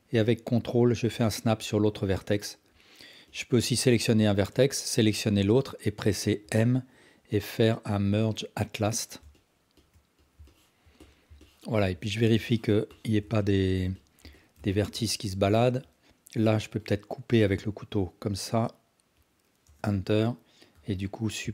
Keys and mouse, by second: 1.8-2.5 alt+drag, 6.4 m, 9.3 alt+shift+drag, 10.3 alt+click, 10.5 ctrl+alt+click, 11.1 alt+click, 11.5 ctrl+alt+drag, 12.0 alt+z, 12.5 ctrl+alt+click, 13.0 ctrl+alt+click, 13.5-13.8 alt+shift+drag, 14.1 alt+click, 14.3 ctrl+alt+drag, 14.8 alt+shift+click, 15.0 ctrl+alt+drag, 17.4 k, 20.7 2.